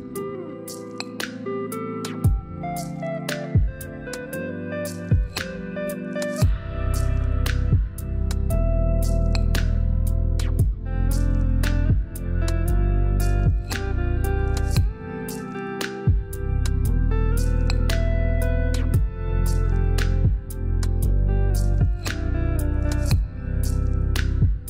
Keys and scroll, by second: 7.9 7, 8.6 5, 9.5 Return.